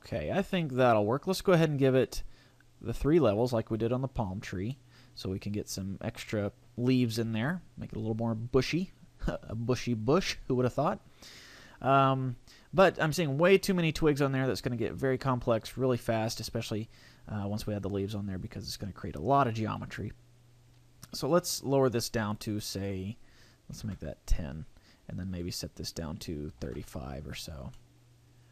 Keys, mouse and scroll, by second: 1.8-2.7 scroll up 1, 2.7 scroll up 1, 2.9 click, 4.7 middle click, 13.5 scroll up 4, 13.9-15.1 scroll down 3, 21.8 click, 22.7 click, 25.4 click, 27.7 middle click.